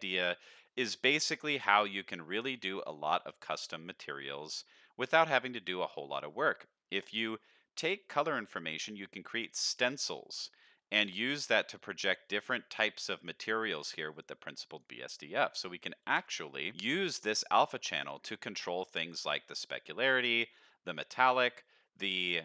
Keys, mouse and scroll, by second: 1.3 scroll down 2, 1.9 middle click, 2.4 shift+middle click, 2.8 middle click, 4.0 middle drag, 4.6 middle click, 5.0 middle click, 5.8 click, 10.5 middle click, 11.4 click, 14.1 click, 15.1 middle click, 16.6 ctrl+s, 17.2 middle click, 18.2 middle click, 18.7 middle click, 19.5-20.6 drag.